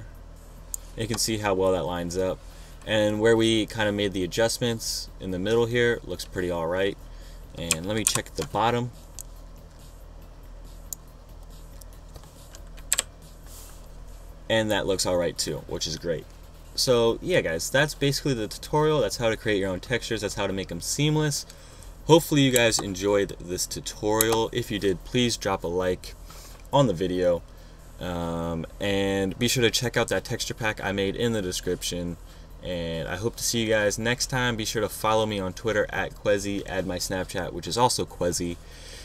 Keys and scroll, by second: 8.7 super+-, 13.6 Up, 23.2 BackSpace, 24.9 BackSpace.